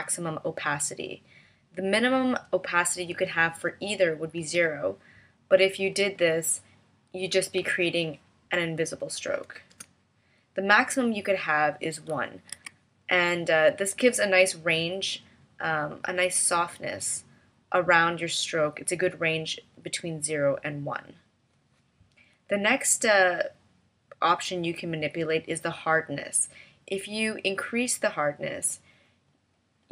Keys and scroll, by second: 3.1 0, 4.4 0, 7.6 v, 9.7 BackSpace, 12.6 1.